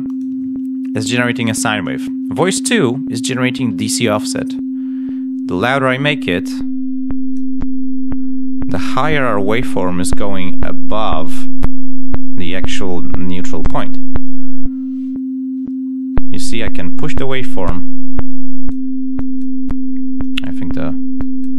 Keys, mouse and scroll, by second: 0.0 click, 9.7 click, 14.1 click, 18.2 click, 19.1 click, 20.1 click, 21.1 click.